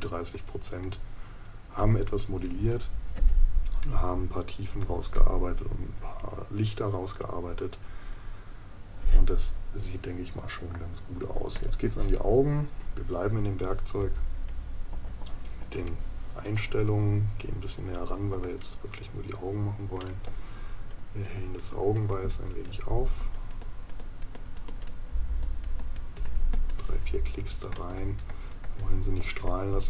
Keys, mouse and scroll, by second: 14.9 ctrl+KP_Add, 18.6 right click.